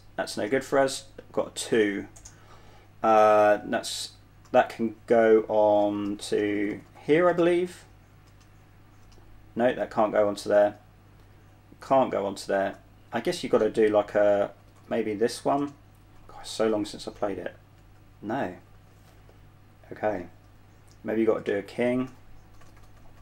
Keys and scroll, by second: 0.7 space, 4.7 typing, 6.0-13.0 typing, 14.2-17.5 typing, 18.9-19.5 typing, 22.4 typing.